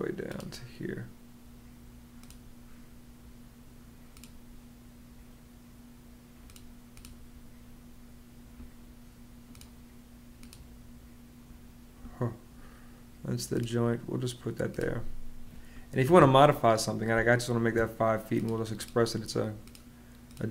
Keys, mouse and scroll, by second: 15.8 Escape, 16.9 space.